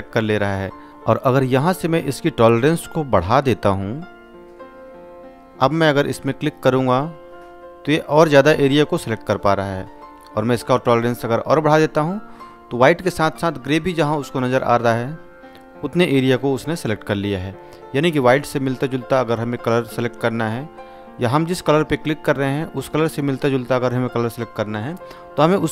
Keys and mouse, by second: 4.6-5.9 drag, 16.8-17.4 drag.